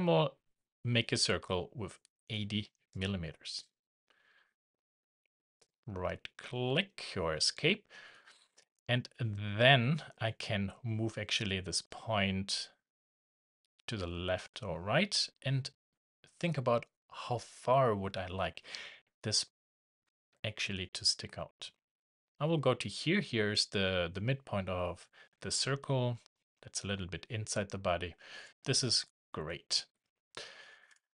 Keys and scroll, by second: 8.0 Escape.